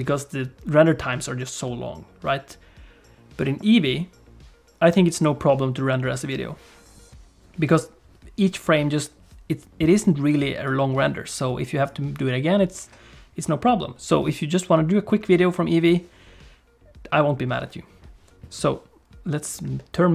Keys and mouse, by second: 10.7-11.9 drag.